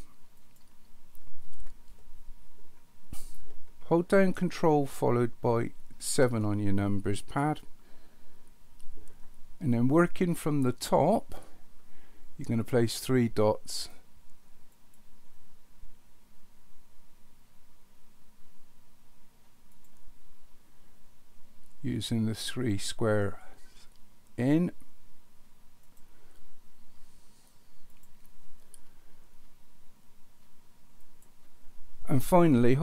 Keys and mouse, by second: 0.4 click, 5.9 ctrl+KP_7, 14.7 click, 19.7 click, 22.5 click, 25.8 click, 27.9 click, 31.0 click.